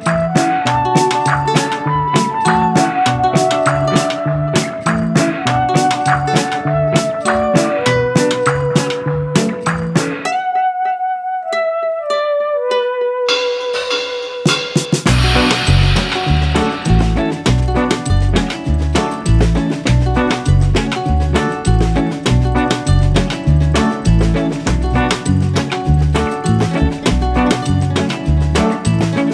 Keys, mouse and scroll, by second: 0.1 ctrl+z, 0.4 scroll down 1, 0.6-2.5 middle drag, 2.5 click, 3.6 click, 4.1 click, 4.6 shift+middle click, 5.2 s, 7.1 scroll down 2, 7.3 shift+middle click, 7.8 s, 8.9 click, 9.4 g, 11.6-11.9 scroll down 1, 11.9-13.0 middle drag, 13.0 scroll up 1, 13.3-14.4 middle drag, 14.4 Tab, 14.8 Tab, 15.1 click, 16.0 click, 16.4 click, 17.5 Tab, 18.5 click, 19.8 shift+click, 20.3 shift+click, 20.8 s, 22.8-23.8 middle drag, 23.8 click, 24.1 Tab, 24.4-25.8 middle drag, 25.8-26.1 scroll up 2, 26.1 click, 26.5-27.8 middle drag, 27.8 scroll up 1, 28.1 middle click, 28.7 click, 29.2 shift+click.